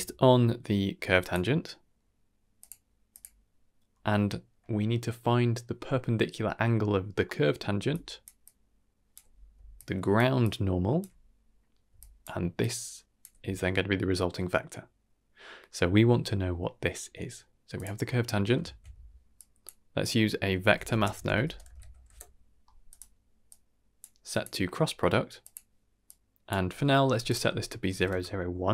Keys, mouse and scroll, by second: 7.2 middle drag, 7.8-13.2 typing, 7.9 click, 8.4 click, 9.7-10.1 drag, 10.4-11.0 drag, 11.9 drag, 12.5-13.2 drag, 17.7 click, 18.0 middle click, 18.6 shift+a, 23.5-24.0 drag, 24.3-25.5 drag, 26.0-26.5 drag, 27.2 click.